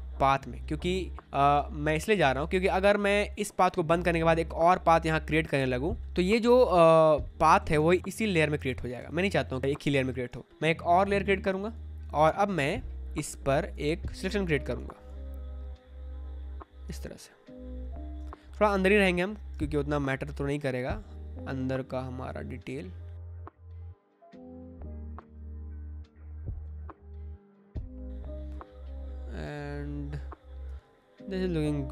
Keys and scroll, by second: 1.4 space, 6.0 ctrl+z, 7.3 ctrl+z, 8.5 ctrl+z, 11.3 space, 12.0 space, 13.7 space, 16.7 space, 19.5 space, 22.6 space, 23.8 space, 25.0 space, 26.0 space, 27.4 space.